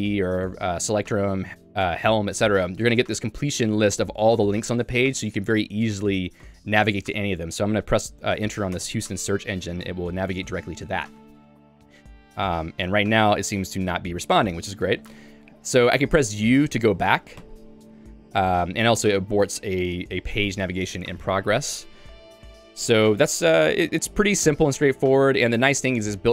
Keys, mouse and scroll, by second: 8.8 Return.